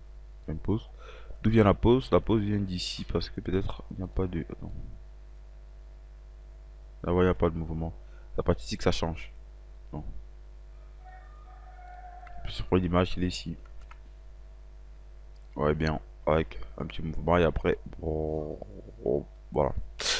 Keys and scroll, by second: 13.6 Delete.